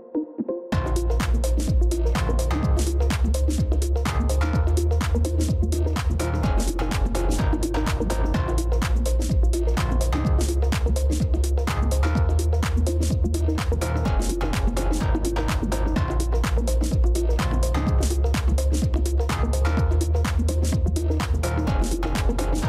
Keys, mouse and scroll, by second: 0.7 ctrl+-, 0.9 ctrl+-, 2.4 space, 6.9-9.7 scroll up 1, 11.4 ctrl+-, 11.9 space, 15.6 right click, 19.5 right click.